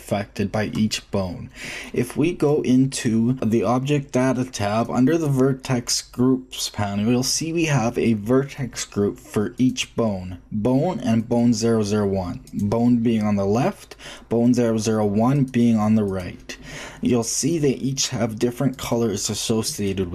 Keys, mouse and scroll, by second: 4.5-6.6 drag, 9.5-14.4 drag, 15.3-17.8 drag, 18.7-20.1 drag.